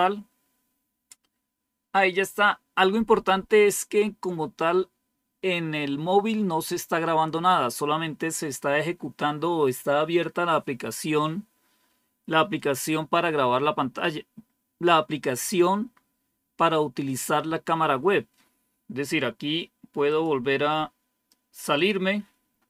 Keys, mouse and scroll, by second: 20.0 click, 20.5 click, 21.7 click.